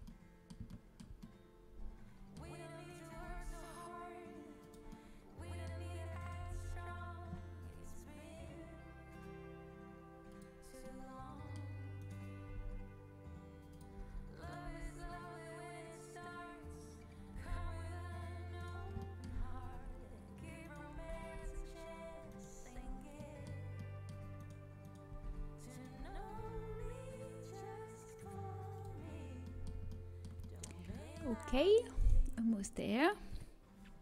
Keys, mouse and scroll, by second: 1.7-4.6 drag, 2.8 middle click, 3.1 g, 4.6 middle click, 5.3 click, 6.3-9.2 drag, 12.4 g, 13.9 z, 14.6 z, 14.8 g, 18.9 middle click, 19.7 z, 20.9 z, 21.9 g, 22.5 middle click, 22.7 z, 25.0 g, 25.9 z, 29.1-33.3 middle drag, 31.9-33.3 drag, 31.9-33.3 right drag, 33.3 KP_7.